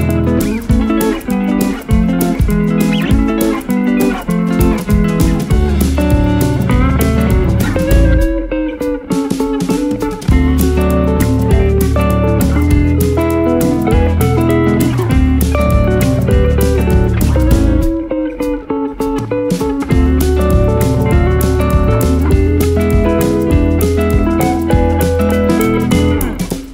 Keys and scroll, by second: 1.2 2, 1.3 1, 2.2 BackSpace, 2.6 Return, 4.9 ctrl+Page_Down, 6.0 Escape, 10.2 1, 10.4 0, 10.6 Return, 11.6 F4, 14.6 shift+F2, 14.8 F3, 15.6 shift+Page_Up, 16.0 F3, 23.7 F4, 24.1 Escape, 26.1 F2.